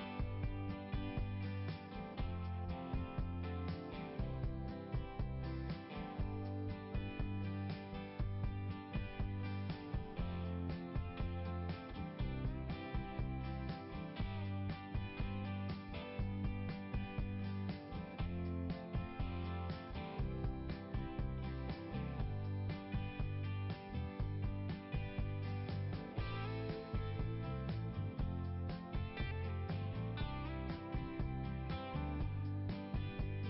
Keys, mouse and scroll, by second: 1.3-2.5 scroll down 1, 2.6 click, 3.9 click, 5.3 click, 5.7 click, 6.6 click, 13.7 click, 15.5 click, 17.5 click, 18.6 click, 20.7 click, 21.6 click, 22.5 click, 25.1-26.6 scroll up 2, 26.9 click, 27.7 click, 28.4-29.1 scroll up 1, 30.8-31.2 scroll up 1, 32.3-32.8 scroll down 2.